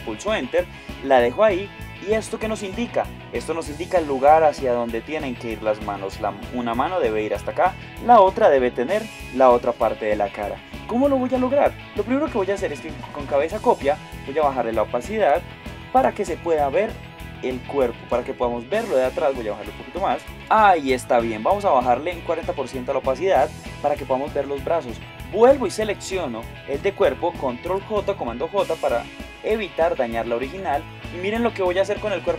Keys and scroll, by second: 20.3 shift+Up.